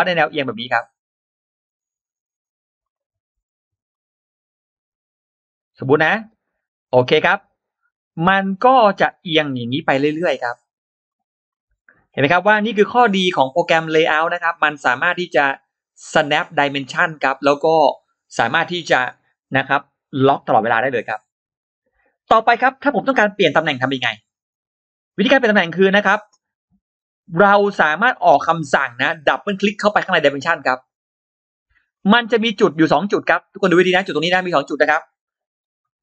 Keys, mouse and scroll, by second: 1.3 click, 2.7-3.9 drag, 5.6 click, 6.3 click, 7.0 click, 8.0 click, 8.6 space, 9.1 click, 10.1-11.3 drag, 11.8-12.1 scroll up 1, 13.5 click, 15.2 click, 16.0 click, 16.2-16.5 scroll down 2, 16.6-16.9 scroll up 2, 23.6-23.9 scroll up 2, 24.2-24.5 scroll up 2, 24.8 click, 27.6 scroll up 2, 28.3-28.6 scroll down 2, 30.5 click, 30.7 click, 31.5-31.8 scroll up 2, 33.0-33.3 scroll down 2, 33.8-34.1 scroll up 2, 35.5 shift+x, 35.9 shift+click.